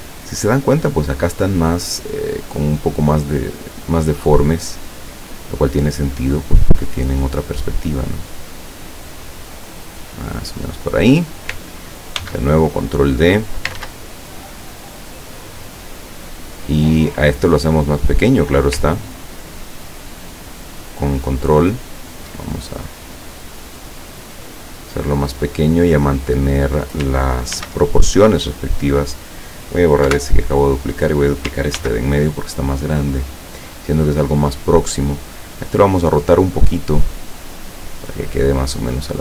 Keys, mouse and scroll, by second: 3.0 click, 3.6 click, 5.0-6.1 drag, 7.0-11.1 drag, 12.2 ctrl+d, 12.8 ctrl+click, 13.8 ctrl+z, 14.8-16.5 drag, 17.3 click, 18.1 click, 18.9-22.2 ctrl+drag, 22.9-26.7 drag, 27.6 ctrl+d, 28.3 click, 30.1 Delete, 31.0 click, 31.8 ctrl+d, 32.2-35.2 ctrl+drag, 35.9 click, 36.7-38.7 drag.